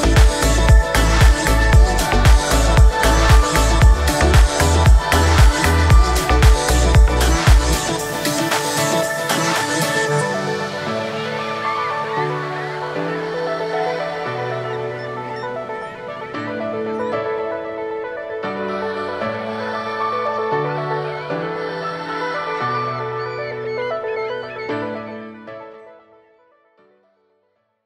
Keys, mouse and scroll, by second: 3.8 space, 4.5 right click, 5.4-6.4 scroll down 5, 7.1 click, 7.9 click, 8.8-11.0 drag, 11.0-11.5 middle drag, 11.5 right click, 12.5 space, 12.7 g, 20.8 g, 21.9 space, 22.6-25.6 middle drag.